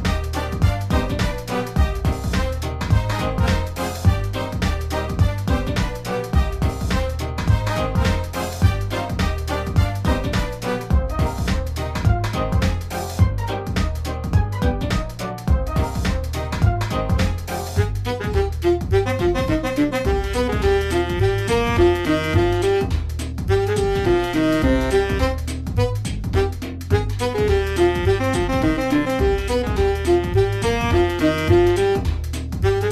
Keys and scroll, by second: 0.0-1.3 typing, 2.4-5.2 typing, 7.3 space, 8.6 space, 9.2 space, 10.4 space, 10.7 space, 11.5 space.